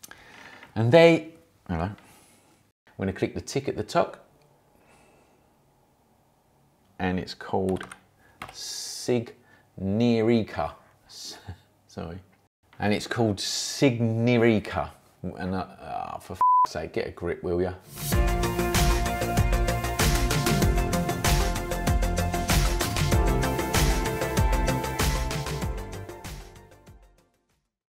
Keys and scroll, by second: 7.4-8.4 typing.